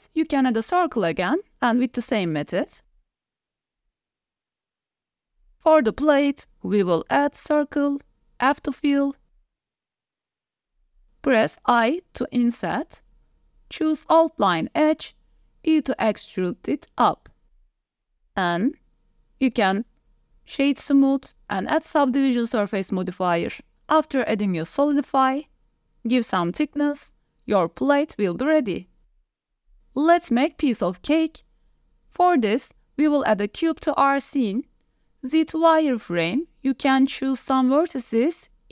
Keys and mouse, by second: 0.9 s, 1.6 g, 1.7 z, 2.2 shift+middle click, 2.3 s, 3.2 Tab, 3.4-5.6 typing, 3.9 middle click, 4.2 Tab, 4.4 click, 5.3 Tab, 7.4 Tab, 8.2 f, 8.9 Tab, 9.3 s, 10.6 shift+click, 10.8 Tab, 10.9 click, 11.6 i, 13.6 3, 13.6 2, 14.6 e, 15.1 z, 17.0 s, 18.9 click, 19.4 Tab, 20.5 ctrl+1, 21.0 click, 22.0 middle click, 23.5-24.6 drag, 26.1-26.9 drag, 27.4 click, 28.6 click, 29.4 Tab, 29.4 click, 30.5 shift+a, 32.1-34.7 typing, 34.2 drag, 35.7 shift+click, 35.8 s, 36.6-37.0 drag, 37.4 KP_7, 37.4 shift+click, 37.7 Tab, 38.2 1.